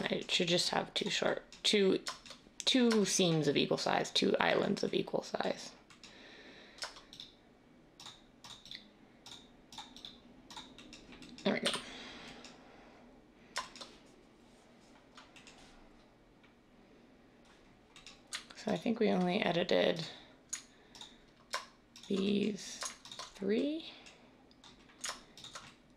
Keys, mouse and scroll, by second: 11.5 a.